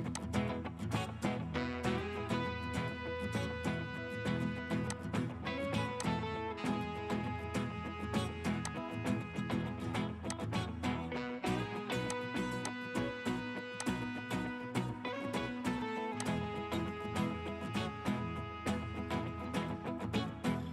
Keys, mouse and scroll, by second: 14.3 middle click, 15.1-16.2 scroll down 1, 18.7 scroll up 1, 19.1-20.7 scroll down 1.